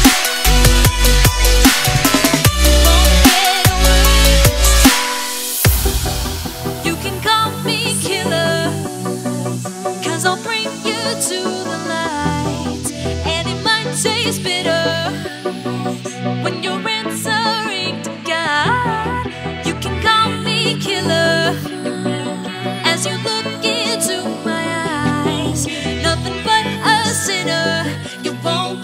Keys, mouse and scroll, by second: 1.8 click, 4.6 click, 6.9 Return, 7.6 click, 10.5 Delete, 11.9 click, 12.5 right click, 14.4 click, 16.1-17.4 scroll down 1, 17.4 click, 17.8 right click, 18.5 click, 19.1-19.8 scroll down 1, 19.8 click, 21.7 ctrl+c, 22.1 click, 23.9 ctrl+v, 24.6 click, 27.1 scroll down 1, 27.4 click, 27.5 Left.